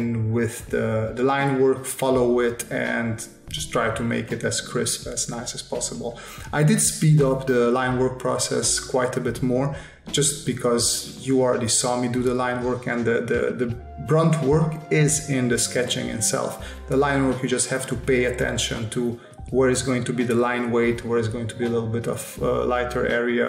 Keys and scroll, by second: 0.3 s, 1.0 space, 2.4 space, 3.4 space, 4.8 space, 6.9 space, 7.8 space, 9.3 space, 10.7 space, 11.7 space, 12.4 space, 14.1 space, 14.8 space, 15.4 space, 16.5 space, 17.6 space, 18.2 space, 19.3 space, 20.7 space, 23.2 space.